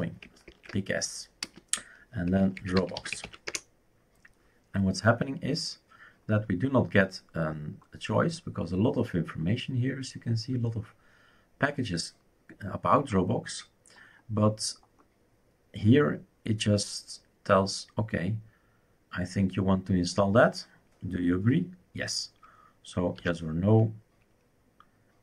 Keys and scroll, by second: 0.0-3.9 typing, 23.1 typing.